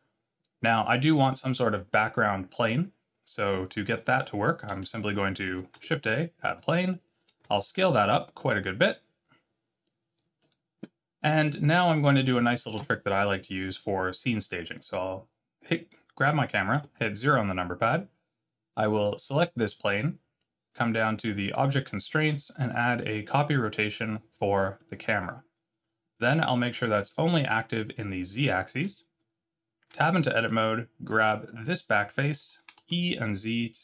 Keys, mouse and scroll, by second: 3.9 middle click, 4.3-5.2 scroll down 4, 5.7 shift+a, 7.4 s, 14.2 click, 16.7 KP_0, 18.9 click, 21.4 click, 22.8 click, 24.0 click, 27.0 click, 27.4 click, 29.9 Tab, 31.0 click, 32.3 e.